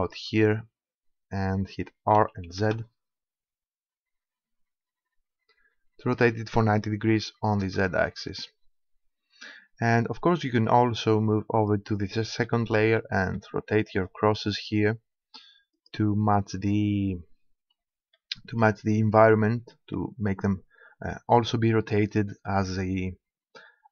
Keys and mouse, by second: 0.1-2.0 drag, 2.2 r, 6.2-7.6 drag, 7.6 KP_0, 11.6-13.3 drag, 13.3 middle click, 15.8-17.5 drag, 17.5 middle click, 18.2-23.9 middle drag.